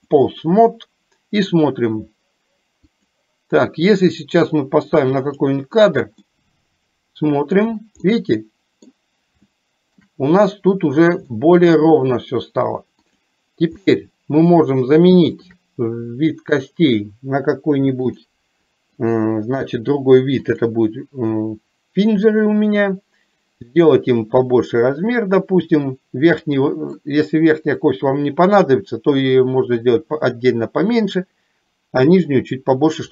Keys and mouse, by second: 3.0 click, 5.5 click, 6.2-7.7 middle drag, 8.1 middle click, 9.5 shift+middle click, 11.5 middle click, 13.1 click, 13.8 middle click, 15.3 shift+click, 19.1-20.7 drag, 22.2 click, 23.8-27.0 drag.